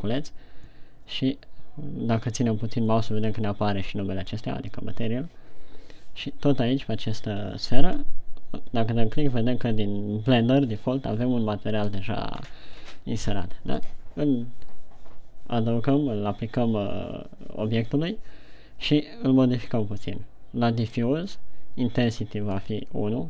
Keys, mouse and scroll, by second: 0.0 click, 8.2 click, 22.6 click.